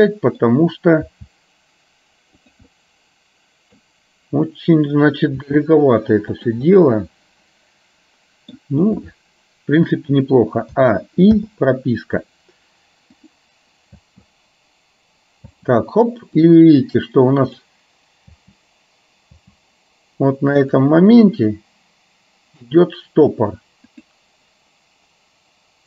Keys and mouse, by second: 2.9-3.9 middle drag, 5.5 r, 6.9-8.6 middle drag, 11.5 i, 13.2 click, 14.1 space, 15.5 space, 16.6-17.9 drag, 18.5 space, 19.5 space, 20.9 click, 21.5-23.0 drag, 24.0 click.